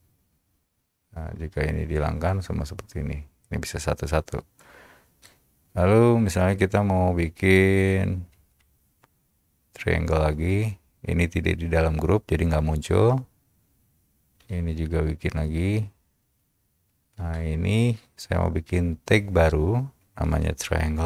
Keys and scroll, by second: 4.7 Return, 8.3-9.1 typing, 10.8 space, 14.5 shift+c, 15.8 space, 20.5-21.0 typing.